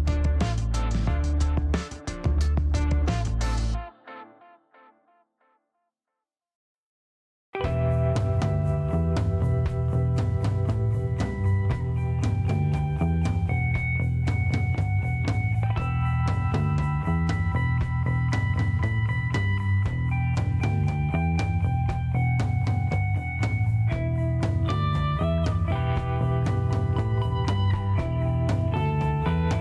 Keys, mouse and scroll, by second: 1.4 click, 2.8 scroll down 1, 3.6-4.1 scroll up 3, 5.5-6.3 scroll up 7, 6.8 scroll up 2, 8.1 click, 9.0 middle click, 10.1 middle click, 10.7 middle click, 11.1 shift+right click, 12.2 shift+middle click, 12.6 shift+right click, 13.6 shift+middle click, 14.2 shift+right click, 15.9 click, 18.3 click, 19.6-19.9 scroll up 4, 20.1 middle click, 20.5-21.0 scroll down 3, 21.8 scroll up 1, 22.8 middle click, 23.4-23.7 scroll up 2, 23.9 middle click, 27.9 click.